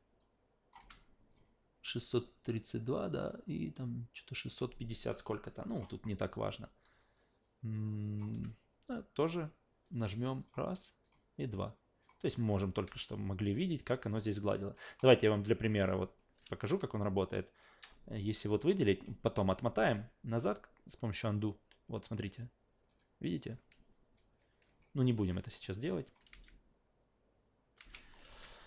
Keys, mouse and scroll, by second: 0.2 shift+click, 0.8 shift+f, 1.3 shift+click, 3.3-5.8 shift+drag, 7.4-8.2 shift+drag, 8.3 shift+f, 10.4 shift+click, 11.0 shift+click, 12.0 shift+click, 12.5 shift+click, 12.8 shift+f, 13.5 shift+click, 14.2-14.7 alt+shift+right drag, 14.9 alt+shift+middle click, 16.0 alt+shift+middle click, 16.4 alt+shift+right click, 17.2 alt+shift+right click, 18.2-18.7 shift+drag, 22.2 shift+click, 22.9 shift+click, 23.7 ctrl+z, 24.2 ctrl+z, 25.1 shift+click, 26.0 shift+click, 26.3 alt+v, 27.8 alt+v, 28.0 shift+click.